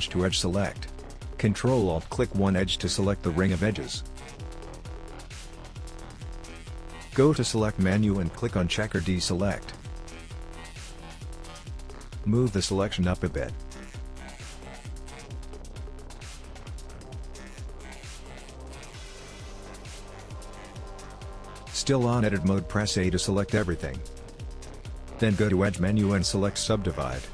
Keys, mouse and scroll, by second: 0.7 click, 3.2 ctrl+alt+click, 7.7 click, 11.2 middle click, 13.7 g, 18.0 middle click, 21.3 middle click, 22.5 middle click, 23.5 a, 24.1 middle click, 26.7 click.